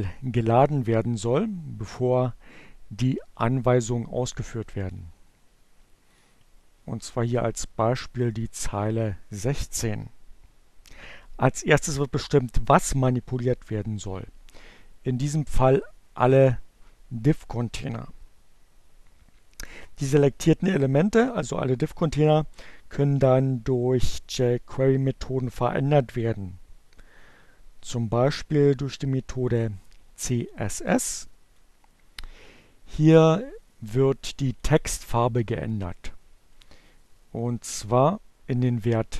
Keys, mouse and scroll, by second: 2.7-4.3 drag, 5.1 click, 14.5-15.6 drag, 28.3-30.9 drag, 31.9-33.9 drag, 35.7 click.